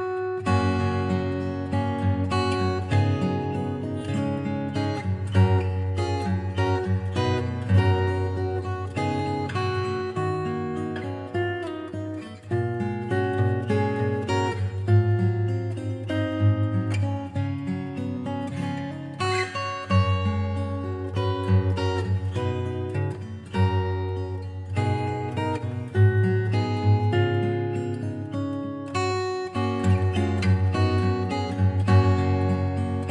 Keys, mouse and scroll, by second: 0.6 click, 2.2 s, 7.2 click, 10.0 click, 10.6 click, 12.2 click, 13.2 click, 14.3 click, 15.5 click, 16.2 click, 17.7 click, 21.0 click, 23.4 click, 24.2 click, 25.6 click, 27.1 click, 29.2 click, 30.8 click, 32.2 click.